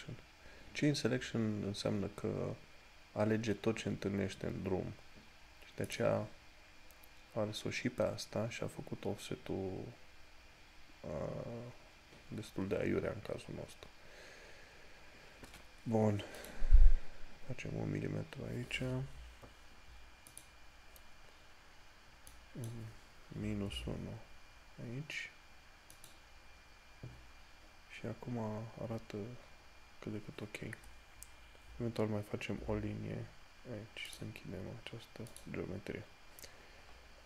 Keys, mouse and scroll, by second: 6.2 click, 16.6 click, 19.4 o, 26.2 click, 31.8 scroll up 1, 32.9 l.